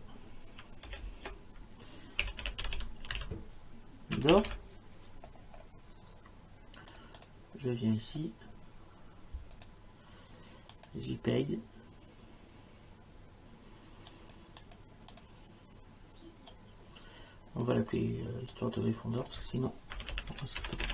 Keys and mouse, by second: 0.9 BackSpace, 2.0-4.5 typing, 6.9 click, 9.6 click, 10.7 click, 14.1 click, 16.5 click, 18.5 click, 19.7-20.9 typing.